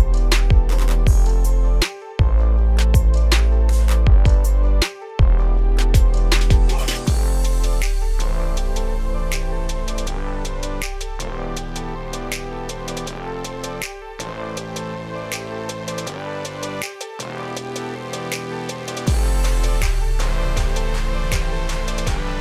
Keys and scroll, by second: 1.7 ctrl+space.